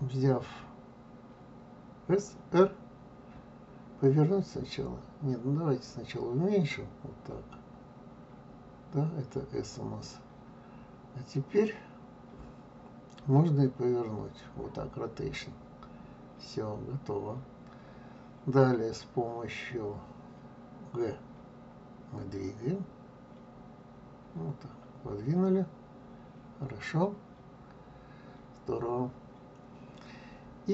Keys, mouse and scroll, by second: 3.4 r, 14.5 r.